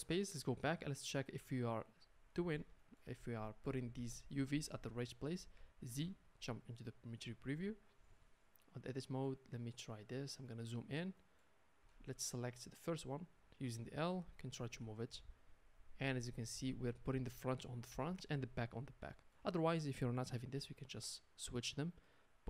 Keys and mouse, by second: 1.4 Tab, 5.9 z, 7.4-11.6 middle drag, 8.1 Tab, 11.8 a, 12.0 a, 13.3 middle click, 13.6 l, 14.6 middle click, 14.6 g, 15.0 middle click, 16.0 middle click, 16.2 middle click, 17.2-22.4 middle drag, 20.9 g.